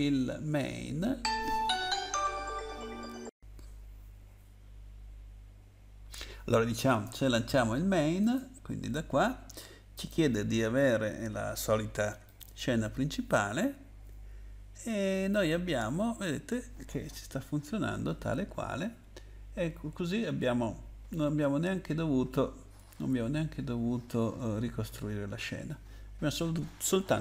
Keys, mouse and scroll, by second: 8.2 click, 9.9 click, 12.2 click, 12.4 click, 18.3 Up, 19.0 Down, 19.5 Down, 19.9 Down, 19.9 Right, 20.4 Right, 20.5 Right, 23.1 Up, 24.1 Insert, 24.4 Right, 24.9 Right.